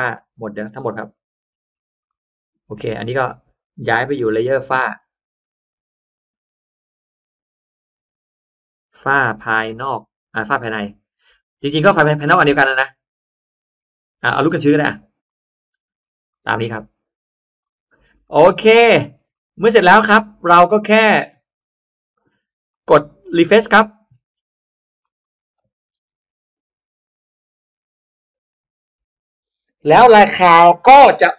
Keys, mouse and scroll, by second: 0.5 scroll down 1, 0.7 middle click, 1.3-1.9 scroll up 2, 2.0 middle click, 2.4 scroll down 1, 2.5 middle drag, 2.8 click, 3.7 middle click, 4.5 k, 12.2 click, 14.7 click, 15.7 middle click, 16.2 middle click, 16.7-17.1 scroll down 1, 17.4 click, 17.8-18.7 scroll down 2, 18.2 middle click, 18.7 middle click, 19.0-19.3 scroll up 1, 19.5 middle click, 21.5 click, 22.6-23.6 drag, 24.9 click.